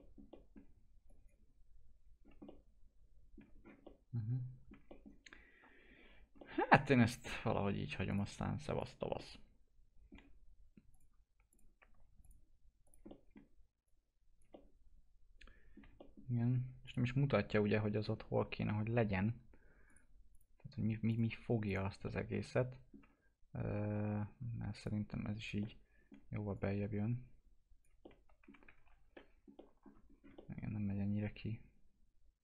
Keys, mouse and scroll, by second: 1.1 click, 2.2 scroll down 1, 2.5 alt+middle click, 3.5 scroll down 1, 4.0 alt+middle click, 4.9 middle click, 5.3 scroll up 1, 6.4-8.1 alt+middle drag, 8.1 click, 9.2-10.9 alt+middle drag, 10.9 click, 13.1 alt+middle click, 13.9 click, 14.5-16.0 alt+middle drag, 16.0 middle click, 16.9 click, 17.0 scroll down 1, 17.3-19.9 alt+middle drag, 19.9 click, 22.1-24.8 alt+middle drag, 24.8 click, 25.6 alt+middle click, 26.6-28.0 drag, 28.0 alt+middle click, 28.8 ctrl+z, 29.1 middle click, 30.1 scroll up 1, 30.4-32.4 alt+middle drag.